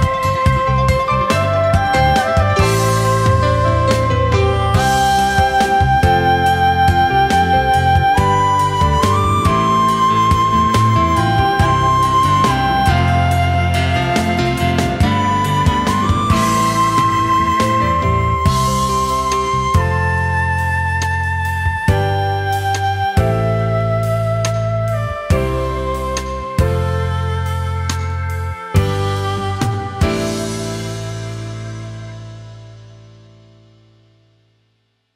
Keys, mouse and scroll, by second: 4.5 ctrl+shift+a, 4.9 space, 11.0 ctrl+shift+a, 11.4 alt+scroll down 1, 11.6 space, 12.3 alt+scroll up 1, 13.0 space, 15.8 ctrl+shift+a, 16.1 alt+scroll down 1, 16.4 space, 17.6 alt+scroll up 1, 19.0 alt+scroll down 1, 19.3 space, 20.2 alt+scroll up 1, 23.6-24.0 alt+scroll up 1, 24.0 space, 25.3-26.4 alt+scroll down 1, 27.2 space, 28.5 alt+scroll down 1, 29.3-29.7 alt+scroll up 1, 30.1 alt+scroll down 1.